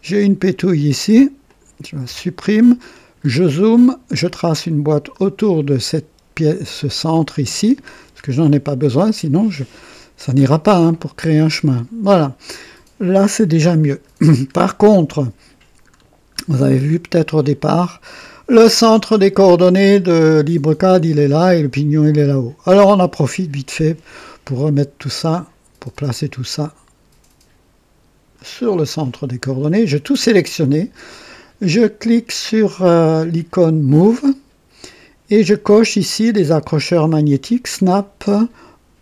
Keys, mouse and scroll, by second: 1.4 click, 2.1 Delete, 2.3 Delete, 2.8-3.5 scroll up 2, 4.3-5.4 drag, 7.3 Delete, 7.9-9.1 scroll down 3, 14.1 scroll down 1, 15.8-17.0 scroll down 6, 17.4 middle click, 17.6 scroll down 1, 25.9-28.6 drag, 34.0 click.